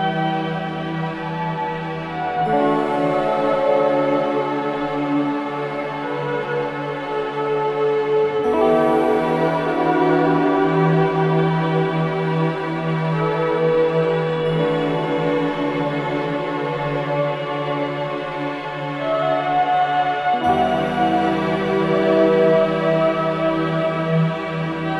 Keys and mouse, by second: 0.0-0.7 drag, 2.1-5.9 drag, 5.9 Tab, 6.8 Tab, 9.2 z, 13.4 KP_3, 14.6 g, 16.9-19.0 drag, 17.6 KP_1, 19.2 middle drag, 19.4 KP_1, 22.6 KP_1, 23.8 KP_1, 23.8 KP_3.